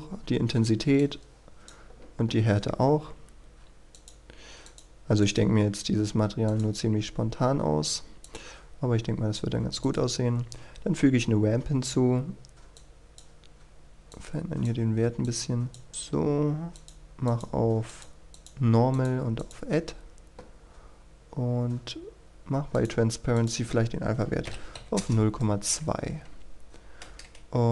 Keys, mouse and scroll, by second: 2.5-3.9 scroll up 1, 3.9-17.9 drag, 20.5-21.3 scroll down 1, 22.7 click, 24.7 KP_2, 24.9 Return, 25.5-26.7 scroll up 1, 26.7-27.1 scroll down 1, 27.1 KP_0.